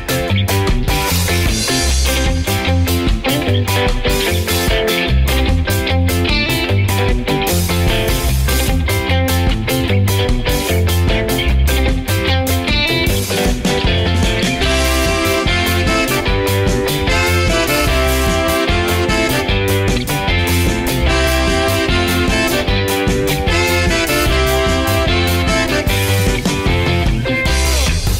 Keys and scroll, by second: 0.0-26.9 typing, 6.2 Return, 25.8 ctrl+'.